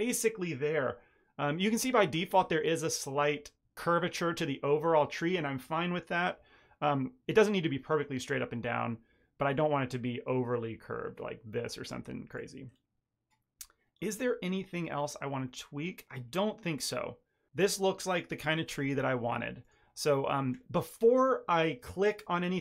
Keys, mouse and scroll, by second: 1.4-1.8 scroll down 1, 1.8 middle click, 2.4 middle click, 3.5 middle click, 9.5 click, 14.2 middle click, 14.6-15.4 scroll up 7, 15.4 middle click, 16.2-17.4 scroll down 2, 17.7-18.1 scroll down 1, 19.6 click.